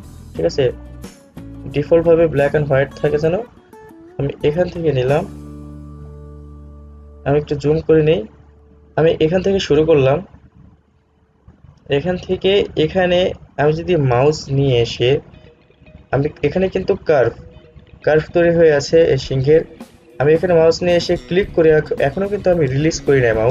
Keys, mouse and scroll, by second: 5.3 click, 7.6 alt+scroll up 1, 8.5 ctrl+z, 11.1 click, 14.4-23.5 drag.